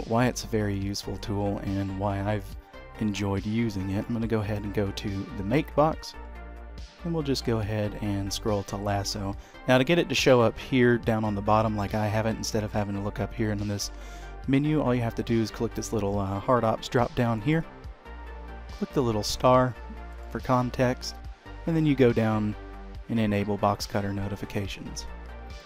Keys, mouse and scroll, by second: 0.1 d, 6.2-7.4 alt+scroll down 3, 7.4-8.5 alt+scroll up 1, 17.2 click, 25.2 click, 25.2 scroll up 2, 25.4 shift+middle click.